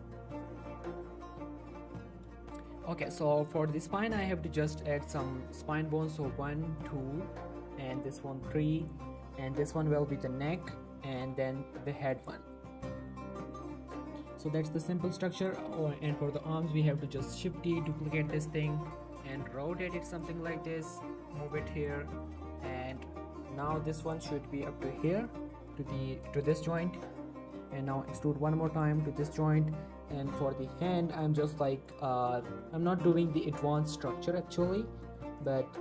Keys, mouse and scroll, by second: 1.8 shift+Num_Lock, 1.8 shift+middle click, 2.4 shift+middle click, 2.8 Tab, 3.4 click, 3.8 shift+middle click, 4.2 click, 4.8 e, 5.3 z, 6.8 click, 7.0 shift+middle click, 7.4 e, 7.7 z, 8.8 click, 9.0 shift+middle click, 9.3 e, 9.7 z, 10.5 click, 10.8 shift+middle click, 10.9 e, 11.1 z, 12.1 click, 12.4 shift+middle click, 12.6 g, 13.0 z, 13.3 click, 13.5 shift+middle click, 14.1 shift+scroll down 1, 14.2 shift+middle click, 14.7 shift+middle click, 15.3 shift+middle click, 15.4 click, 15.7-16.7 scroll up 2, 16.0 shift+middle click, 17.4 shift+d, 18.9 click, 19.3 r, 20.1 click, 20.2 g, 21.2 click, 21.7 r, 22.1 click, 22.4 shift+middle click, 23.0 shift+middle click, 23.4 click, 23.7 g, 24.1 click, 24.3 g, 25.0 click, 25.2 shift+middle click, 26.6 shift+middle click, 26.9 g, 27.3 click, 27.8 e, 28.7 click, 28.9 shift+middle click, 31.9 click, 32.2 shift+click, 33.0 g, 33.2 y, 33.9 click, 35.0 shift+middle click, 35.4 click, 35.6 g.